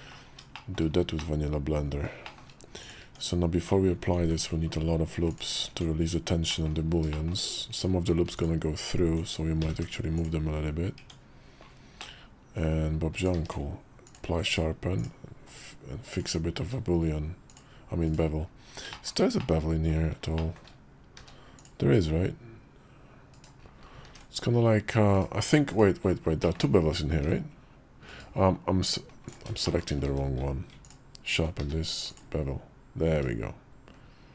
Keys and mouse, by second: 0.4 shift+middle click, 1.0 middle click, 2.1 shift+middle click, 2.7 click, 2.9 Tab, 4.1 ctrl+r, 5.5 Tab, 6.4 middle click, 7.0 shift+middle click, 7.6 Tab, 9.5 g, 10.9 Tab, 11.9 middle click, 13.0 click, 13.2 q, 14.4 q, 16.5 q, 18.8 shift+click, 19.3 middle click, 20.3 shift+click, 21.0 q, 26.3 ctrl+click, 29.2 ctrl+`, 29.5 shift+click, 29.9 q, 31.5 q.